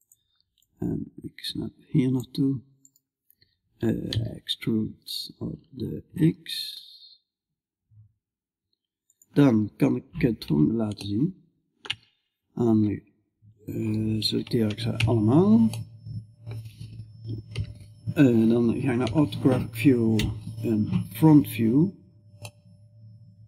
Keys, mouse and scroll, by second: 0.1-3.5 drag, 3.5-8.5 right drag, 3.5 e, 9.1-10.8 middle drag, 10.9 middle click, 11.1 middle click, 11.3-14.1 middle drag, 14.1 a, 14.4 a, 15.2-17.0 middle drag, 17.0 KP_5, 18.5 KP_5, 19.6 KP_1.